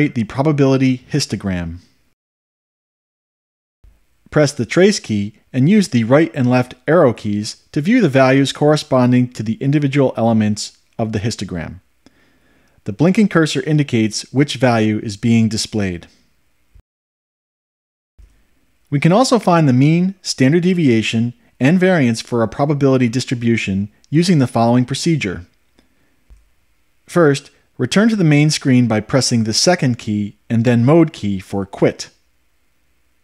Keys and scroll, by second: 9.0 Right, 11.7 Right, 14.7 Left, 17.3 Left.